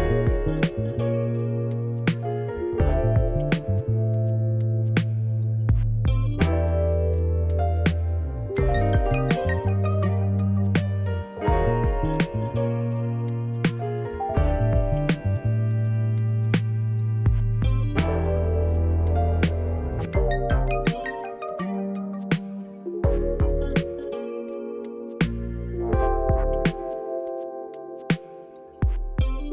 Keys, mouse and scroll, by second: 0.0 scroll down 1, 0.4 middle click, 3.4 click, 3.6 middle click, 3.8-4.3 scroll up 1, 4.3 scroll down 1, 5.0 Tab, 5.4 middle click, 7.0-10.9 middle drag, 7.0 scroll up 1, 7.6 scroll down 1, 8.3 Tab, 10.9-13.5 drag, 17.1-23.7 shift+middle drag, 17.3 scroll up 1, 23.7 alt+shift+click, 26.8 middle click, 27.3 alt+shift+click.